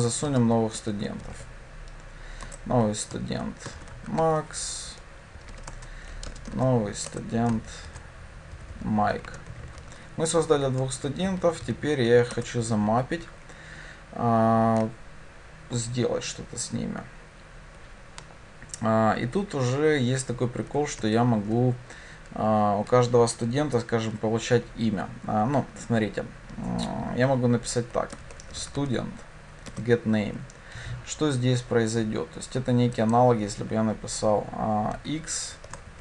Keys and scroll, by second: 2.5 Return, 7.1 Return, 12.4 Return, 29.7 Return.